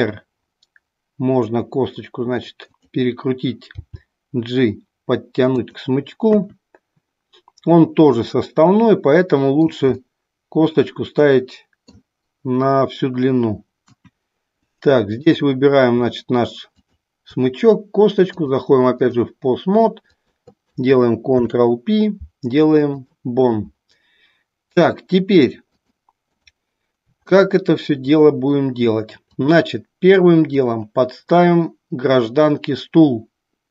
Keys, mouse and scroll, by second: 3.9 g, 8.2-9.6 middle drag, 10.1-11.9 middle drag, 15.2 click, 18.2-19.4 drag, 20.1 click, 25.8 click, 27.4-28.0 middle drag, 29.4 click, 30.5-33.7 drag.